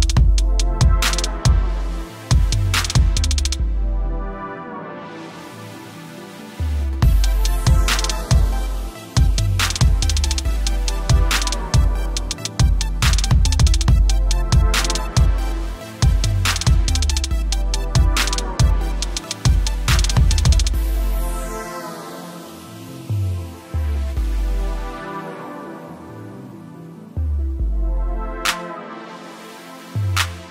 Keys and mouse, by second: 0.3 alt+click, 1.0 t, 1.9 click, 3.6 Return, 3.7 click, 4.4 ctrl+t, 5.1 alt+click, 6.0 click, 6.8 Return, 7.5 click, 9.2 alt+click, 9.3 t, 9.6 click, 11.2 Return, 11.3 ctrl+=, 12.7 click, 13.3 click, 16.4 shift+click, 17.3 ctrl+g, 19.3 click, 21.8 -, 22.6 click, 23.9 a, 24.6 click, 27.2 click, 28.8 click.